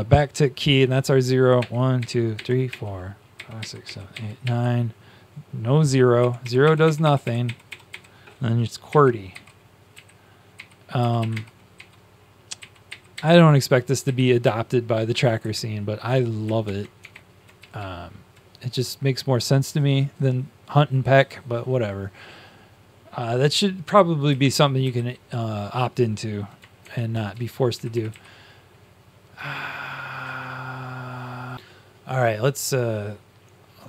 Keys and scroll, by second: 1.5-4.9 typing, 6.1 0, 6.3 0, 6.7 0, 8.5-13.6 typing, 14.8 Up, 15.0 Up, 15.0-15.8 typing, 16.5 shift+Tab, 16.9 shift+Tab, 17.5 Down, 18.3 Down, 26.7 Up, 26.7 shift+Tab, 27.2 Down, 28.0 Up.